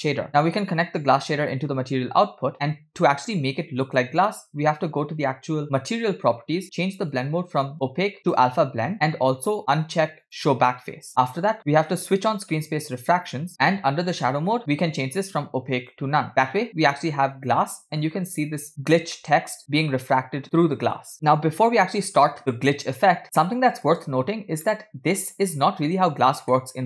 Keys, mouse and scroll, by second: 0.8-2.1 drag, 2.4 click, 2.5 click, 3.2-4.1 middle drag, 5.8 click, 7.2-8.9 drag, 8.9 scroll down 3, 10.7 click, 12.7 click, 14.1-16.1 drag, 16.3-18.1 middle drag, 18.2-18.6 scroll up 1, 18.6 middle click, 19.3-19.7 middle drag, 20.2 middle click, 22.4-23.9 middle drag, 24.7-25.4 middle drag, 26.6-26.8 middle drag.